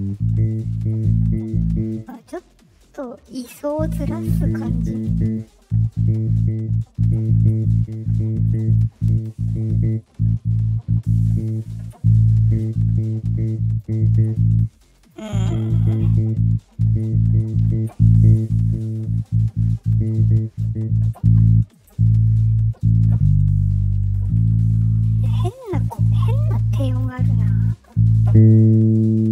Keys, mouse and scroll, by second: 5.3-8.4 drag, 8.6 right click, 9.0 click, 9.8-13.7 drag, 14.4 right click, 14.9 click, 16.3-17.6 drag, 18.9 click, 20.2 click, 25.2 click, 26.3 click.